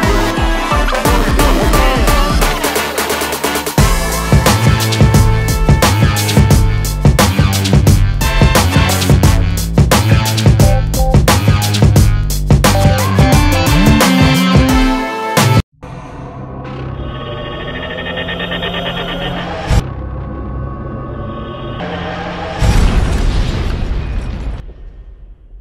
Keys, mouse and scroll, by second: 2.8 middle click, 5.1 middle click, 6.2 middle click.